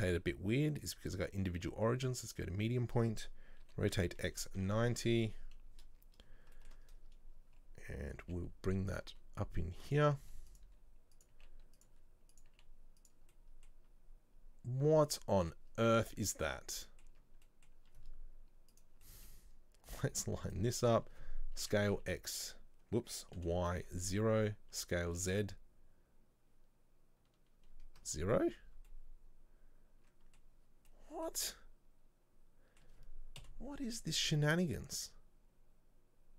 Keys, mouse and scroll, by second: 0.0-3.0 drag, 5.3 KP_3, 6.7 shift+middle click, 7.0 scroll up 2, 8.4 g, 12.6 g, 13.4 middle click, 13.8 scroll down 1, 15.2 middle click, 15.8 scroll up 1, 16.1 Tab, 16.4 right click, 16.9 middle click, 17.2 Tab, 17.6-18.8 middle drag, 18.8 click, 19.1 middle click, 20.0 right click, 20.6 shift+right click, 21.7 s, 29.0-30.7 middle drag, 30.7 scroll down 2, 31.0-33.5 middle drag, 33.5 KP_7, 34.0-35.2 scroll up 2.